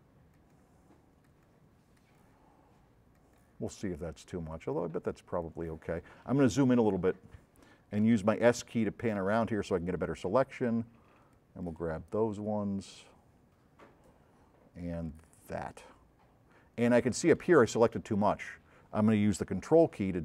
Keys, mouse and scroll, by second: 0.4-0.7 shift+drag, 1.2-1.7 shift+drag, 2.1 shift+drag, 3.2-3.5 shift+drag, 4.6-5.0 shift+drag, 5.5 shift+click, 6.9 shift+scroll up 2, 7.7 shift+middle click, 7.7 shift+scroll up 2, 8.2 s, 8.4 click, 11.5-11.8 shift+drag, 15.0 shift+click, 18.2 middle click, 18.4 scroll up 2.